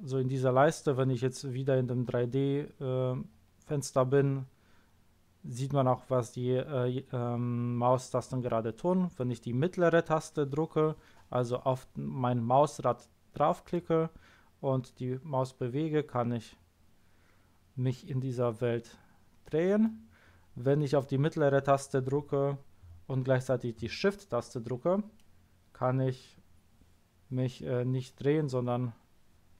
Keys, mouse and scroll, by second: 13.7-15.1 middle drag, 25.1-27.2 shift+middle drag.